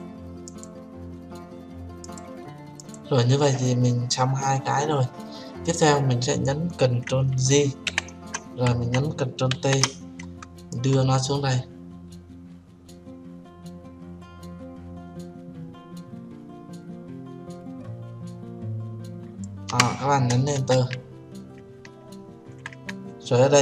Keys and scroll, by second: 8.2 ctrl+j, 10.0 ctrl+t, 20.9 Return.